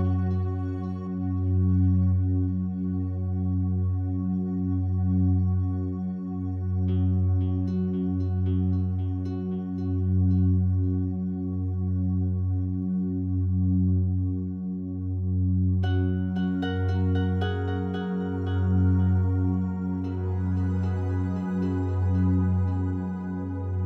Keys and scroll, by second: 8.8 Escape, 16.2 Escape, 19.4 Escape.